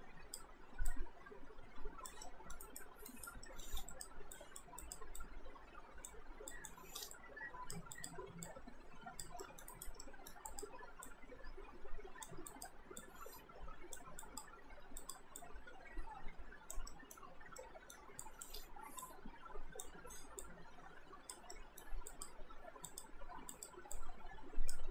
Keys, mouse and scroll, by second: 2.3 alt+middle click, 2.6 alt+right click, 3.5 alt+middle click, 3.9 click, 9.4 alt+middle click, 9.7 right click, 10.1 middle click, 10.5 click, 16.9 middle click, 17.6 middle click, 18.2 click, 21.5 alt+middle click, 22.1 click.